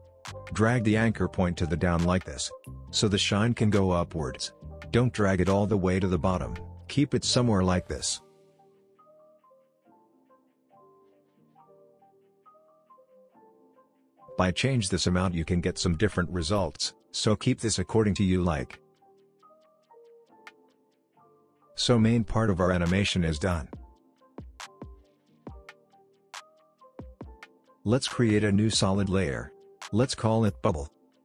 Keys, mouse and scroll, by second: 2.7-7.1 drag, 7.4 alt+scroll up 1, 9.3 click, 11.7 alt+scroll down 1, 12.4-13.7 drag, 13.2-13.7 drag, 20.3 space, 22.9-24.8 drag, 24.6 space, 26.4-26.8 scroll down 1, 26.8-27.2 scroll up 1, 27.2-28.3 scroll down 1, 28.3 click, 28.5 right click, 29.9 click, 29.9 click.